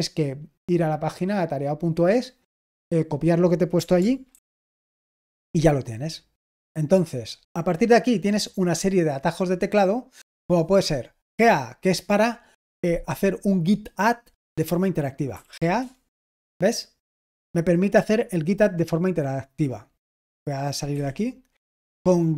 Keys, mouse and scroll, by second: 0.1-1.1 right drag, 4.2 ctrl+alt+v, 5.1 Return, 7.9-10.3 scroll down 1, 10.3-12.6 drag, 15.0-15.8 typing, 20.8 Escape, 22.1-22.3 typing.